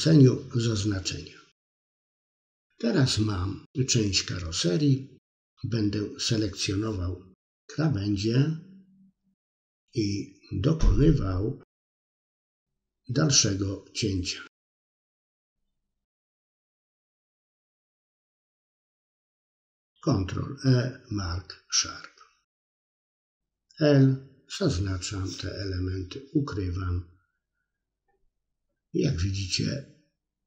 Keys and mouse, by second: 0.3-3.1 middle drag, 5.0 middle click, 8.7 click, 9.4 alt+shift+click, 10.0 middle click, 10.3 alt+shift+click, 10.9 middle click, 11.8 middle click, 13.2 middle click, 14.2 ctrl+z, 14.3 ctrl+z, 14.7 middle click, 15.2 alt+shift+click, 16.0 middle click, 16.9 alt+shift+click, 17.0 middle click, 17.7 middle click, 18.9 ctrl+e, 19.6 middle click, 21.3 l, 22.3 middle click, 23.0 l, 23.1 middle click, 23.4 l, 23.5 middle click, 23.9 middle click, 24.4 h, 24.5 middle click, 25.3 KP_3, 25.7 middle click, 26.0 middle click, 28.5 middle click, 29.0 alt+shift+click, 29.6 ctrl+e, 30.2 middle click.